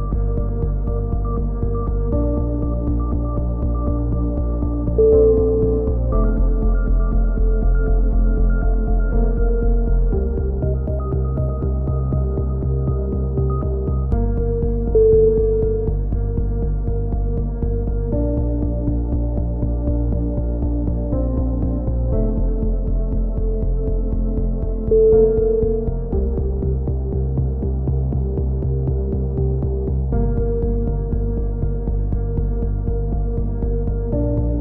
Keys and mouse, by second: 1.0 right click, 1.1 middle click, 1.5 f, 1.5 a, 1.6 click, 1.6 middle click, 2.1 right click, 2.4 click, 2.8 middle click, 3.2 right click, 3.8 shift+q, 3.8 a, 4.0-6.2 drag, 5.0-6.2 right drag, 6.2 f, 6.7-8.6 right drag, 8.3 click, 9.3 shift+q, 9.4 a, 11.1 f, 11.2 a, 11.9 right click, 12.7 f, 12.8 a, 13.1 click, 13.7-14.7 right drag, 14.3 f, 14.3 a, 14.7 click, 16.4 right click, 16.8 click, 17.5 right click, 17.8 click, 18.3-19.6 right drag, 19.3-21.2 drag, 21.2 right click, 21.4 click, 22.0-24.1 right drag, 22.9 click, 25.1 click, 25.4 right click, 26.0 click, 26.5 x, 27.0-29.1 drag, 29.1 right click, 29.3 click, 29.8 shift+q, 30.3 right click, 31.0 shift+q, 31.3 click, 32.1 a, 32.3 right click, 33.3 shift+q, 33.4 a.